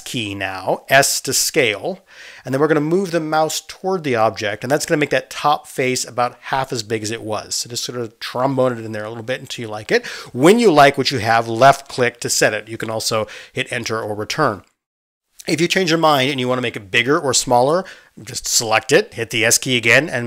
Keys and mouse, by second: 1.1 s, 14.3-20.2 drag, 17.8 s.